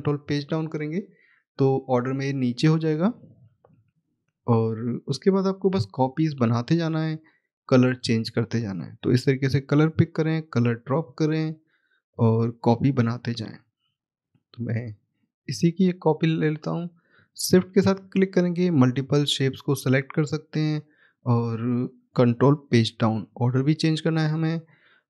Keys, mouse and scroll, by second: 2.1 click, 4.9 click, 6.3 right click, 7.9 click, 12.0 middle click, 12.3 scroll down 1, 13.2 middle click, 13.8-15.5 scroll up 1, 15.5 click, 17.3 shift+click, 20.4 right click, 21.4 scroll up 1, 24.0-24.6 scroll down 1, 24.6 middle click.